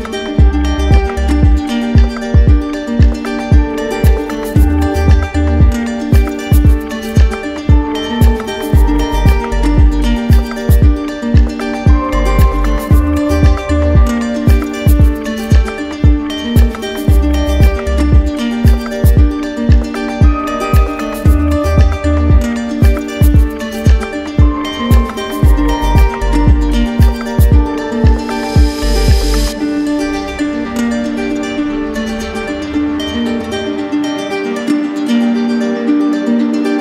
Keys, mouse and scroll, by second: 1.0 click, 2.2 right click, 3.8 click, 4.8 right click, 6.7 right click, 8.0 shift+click, 8.5 shift+click, 8.8 shift+click, 9.5 shift+click, 9.9 shift+click, 10.6 shift+click, 10.9 shift+click, 11.2 shift+click, 11.7 shift+click, 12.5 right click, 13.3 alt+right click, 15.2 right click, 16.7 right click, 17.8 click, 19.0 right click, 20.0-21.6 alt+right drag, 21.7 click, 22.6-25.1 right drag, 25.2 shift+click, 27.0 right click, 27.8 right click, 28.7 shift+right click, 28.8 shift+right click, 29.7 click, 31.1 click, 33.3 shift+click, 34.3 alt+right click, 35.4 shift+click, 36.3 right click.